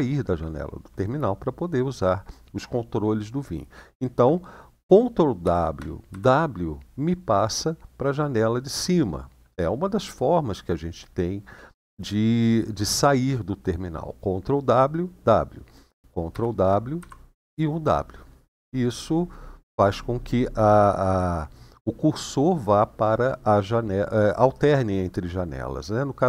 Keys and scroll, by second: 5.2 ctrl+w, 5.8 w, 16.1 ctrl+w, 16.7 w.